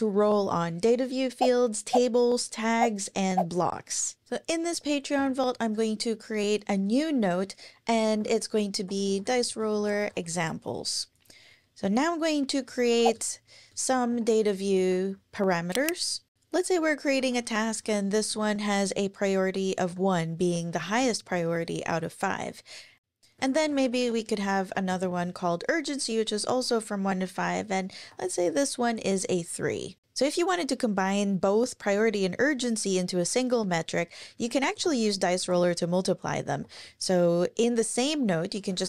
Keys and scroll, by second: 5.1 super+n, 7.8-10.2 typing, 12.8-14.7 typing, 15.3 Up, 16.9-20.3 typing, 21.0 Return, 23.1-24.9 typing, 28.0 3, 28.7 Down, 34.3-38.8 typing.